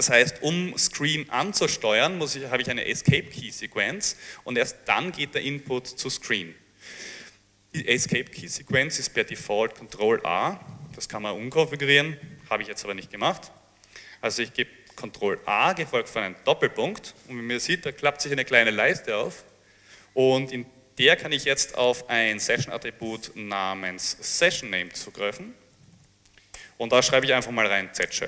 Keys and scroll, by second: 12.1 BackSpace, 12.6 BackSpace, 15.4 a, 16.5 ., 18.8 a, 24.5-27.8 typing.